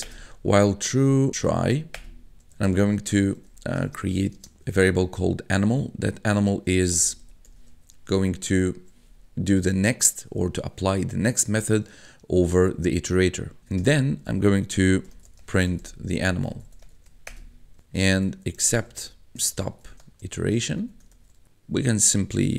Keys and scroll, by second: 0.1 Return, 1.3-4.4 typing, 1.9 Return, 6.7-8.2 typing, 13.6 Tab, 14.5-21.9 typing, 17.8 Tab.